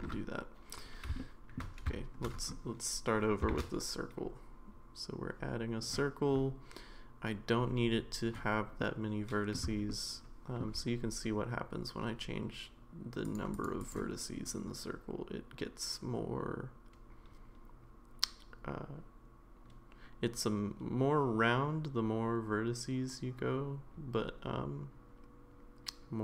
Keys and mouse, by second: 0.0 ctrl+z, 1.2-1.6 shift+middle drag, 3.5 shift+a, 8.8 middle click, 9.9 shift+middle click, 13.3 click, 13.5 click, 13.8 click, 14.5-26.2 drag.